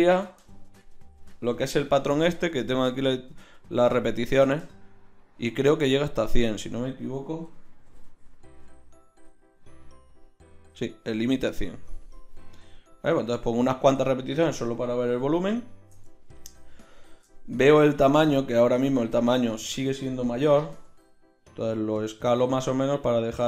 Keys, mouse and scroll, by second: 2.9-8.0 drag, 8.0 KP_0, 11.6-15.1 drag, 15.1 KP_1, 20.7 s.